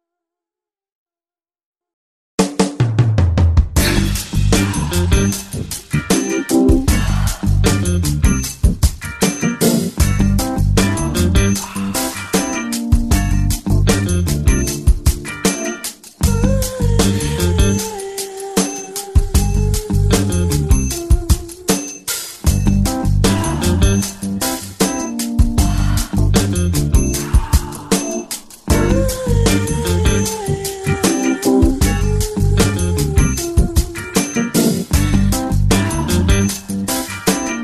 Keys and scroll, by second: 8.0 [, 13.5 ], 16.3 [, 16.5 [, 18.1 [, 22.6 ], 22.8 ], 29.8 [, 30.0 [, 34.9 [.